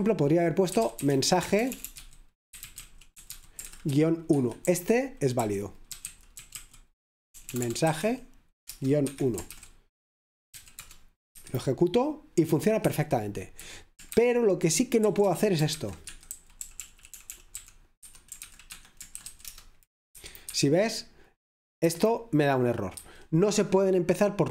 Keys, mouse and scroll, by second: 0.0 typing, 1.4-10.5 typing, 8.8 Return, 9.1 Escape, 10.8 Return, 11.3 F5, 14.0-20.7 typing, 21.9 F5.